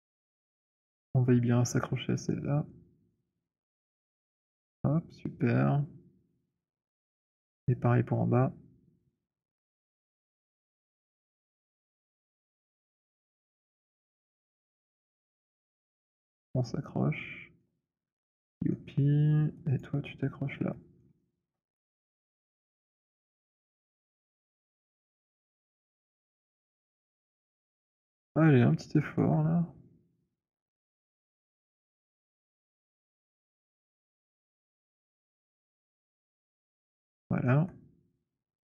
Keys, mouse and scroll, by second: 1.7-4.6 c, 3.9 c, 4.9 middle click, 4.9 c, 6.8 click, 9.5 right click, 11.0 click, 11.6-13.1 c, 13.6 middle click, 13.6 c, 14.8 middle click, 15.3-17.7 typing, 17.7 middle click, 18.9 alt+middle click, 19.7 click, 20.8 alt+middle click, 21.5 alt+right click, 23.0-27.2 typing, 25.0 middle click, 25.3-25.8 scroll, 27.2-27.9 scroll, 28.1 alt+middle click, 29.2 alt+right click, 30.5-36.0 typing, 31.1-31.5 alt+scroll, 33.0-33.6 scroll, 35.5 middle click, 36.0 middle click, 36.0-37.5 scroll, 37.5-38.6 alt+middle click.